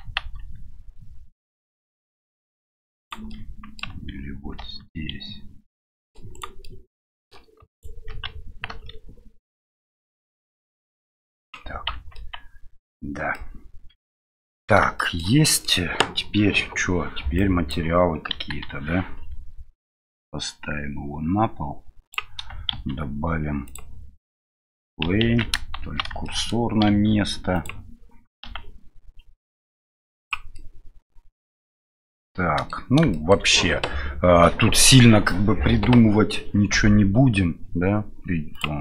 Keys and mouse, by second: 0.2 ctrl+b, 3.3 middle click, 4.5 ctrl+r, 6.6 middle click, 7.7 alt+right click, 8.7 ctrl+b, 11.9 Tab, 12.1-13.2 middle drag, 13.3-14.3 middle drag, 14.9 shift+middle drag, 15.4 middle drag, 17.3 click, 18.3 KP_1, 20.0-22.1 drag, 22.7 shift+a, 25.3 ctrl+z, 25.8 shift+c, 26.2 shift+middle click, 26.8 shift+a, 30.6-31.4 middle drag, 32.1-32.7 middle drag, 33.1 shift+middle click.